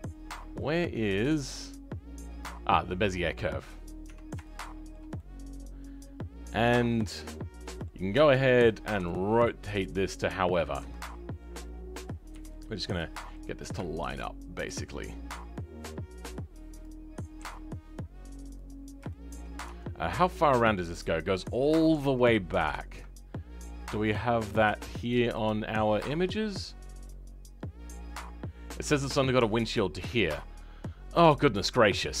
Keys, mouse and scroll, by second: 3.3-3.9 scroll up 3, 3.9 Tab, 4.3-7.2 shift+middle drag, 7.2 scroll up 1, 7.5-11.1 middle drag, 11.1-12.2 scroll down 3, 12.2 KP_3, 12.6 scroll up 4, 13.0 shift+middle click, 13.4 scroll up 2, 13.7 shift+middle click, 14.6 g, 18.7 scroll down 3, 19.0-20.1 shift+middle drag, 22.9-25.2 shift+middle drag, 25.2 click, 25.9-27.0 scroll down 6, 27.0-30.2 middle drag, 30.2-32.2 scroll down 4.